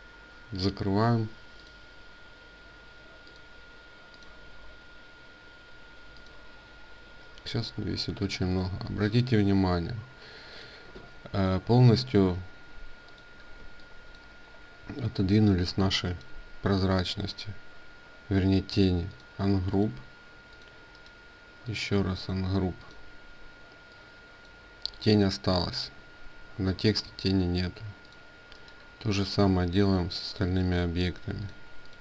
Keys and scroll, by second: 8.8 ctrl+a, 10.7 ctrl+space, 13.0 ctrl+space, 26.6 ctrl+z.